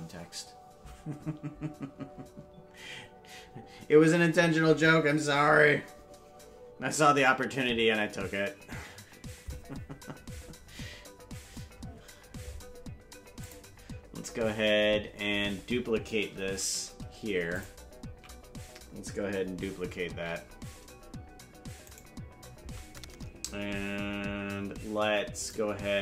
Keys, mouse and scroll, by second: 13.4 click, 17.5 ctrl+click, 20.2 shift+d, 25.3 click.